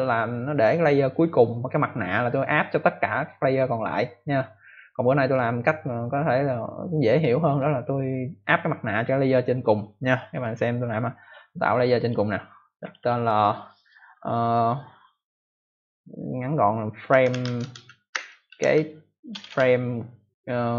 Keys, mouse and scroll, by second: 11.9 click, 12.7 click, 12.9 click, 13.0 double click, 16.8-19.2 typing.